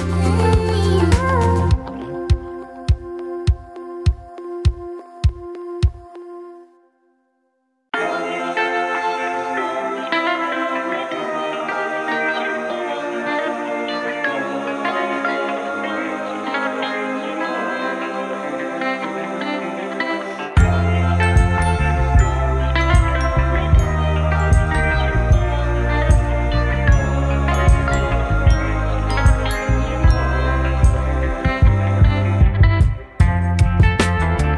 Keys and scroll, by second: 2.9 F3, 4.1 ctrl+b, 4.5 Return, 4.9 3, 5.2 2, 6.8 ctrl+b, 7.4 Return, 7.8 F3, 8.6-9.4 typing, 12.1 2, 12.8 1, 13.0 alt+c, 14.3 F3, 15.0 F3, 15.7 ctrl+alt+z, 18.9 F2, 19.3 F3, 20.2 F3, 21.0 4, 21.3 F3, 21.8 F3, 22.2-23.1 typing, 23.2 ctrl+shift+w, 24.3 F3, 25.9 F4, 27.2 F4, 30.3 ctrl+shift+e, 30.9 ctrl+shift+e, 31.5 ctrl+shift+e, 32.9 ctrl+shift+e, 34.2 ctrl+shift+e.